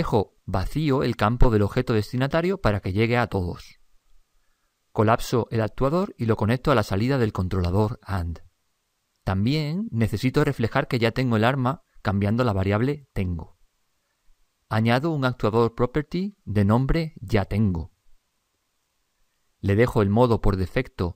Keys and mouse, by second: 12.5 click, 16.7 click, 20.6 click.